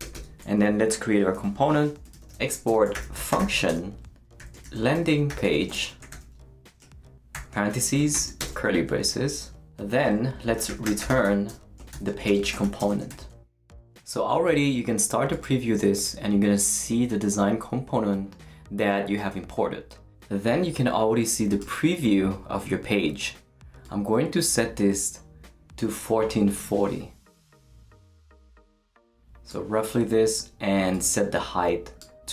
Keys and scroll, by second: 0.0 Return, 1.6-8.1 typing, 7.7 shift+Right, 8.4 shift+Return, 9.3 Return, 10.3-13.6 typing.